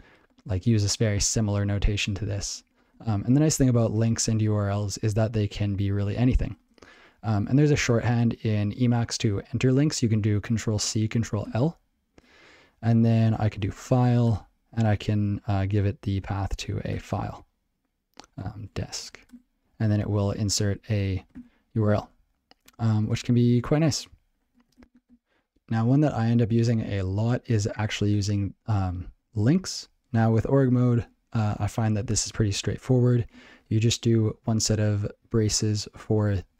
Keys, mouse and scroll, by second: 0.3 click, 0.4 click, 0.8 ctrl+e, 1.2 ctrl+a, 3.0 ctrl+p, 17.0 Return, 18.3-20.3 typing, 21.3 ctrl+l, 22.0 ctrl+g, 30.9 click, 31.4 ctrl+n, 36.0 space.